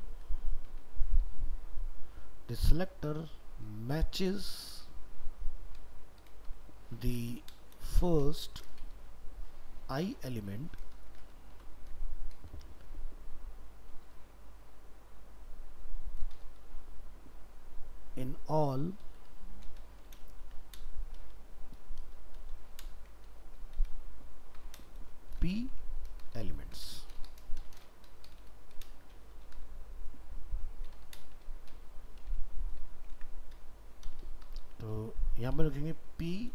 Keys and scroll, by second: 24.9 ctrl+v, 33.1 ctrl+s.